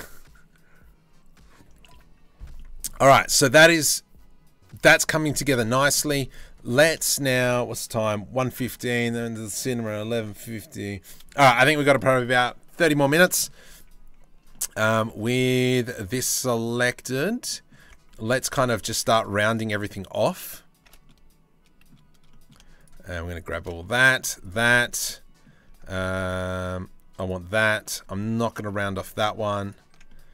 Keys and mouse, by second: 3.0-12.6 middle drag, 12.6 Tab, 14.7 a, 17.0 Tab, 17.1 click, 17.4 Tab, 17.8 2, 18.1 alt+click, 19.6 alt+shift+click, 20.6 click, 21.9 click, 23.4 click, 24.4 click.